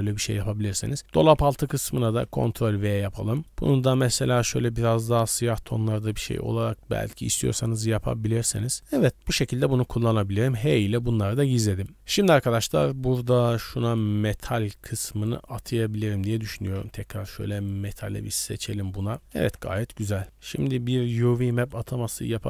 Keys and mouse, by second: 1.0-1.4 drag, 1.4 a, 1.8 x, 2.2 ctrl+v, 3.4 middle click, 4.3 drag, 6.1-6.6 middle drag, 7.6-8.5 middle drag, 8.8-9.3 drag, 9.3-9.6 middle drag, 10.3 h, 11.0 middle drag, 12.5 click, 13.4 g, 14.9-18.8 drag, 19.4 KP_Decimal, 20.2 Tab, 20.4 a.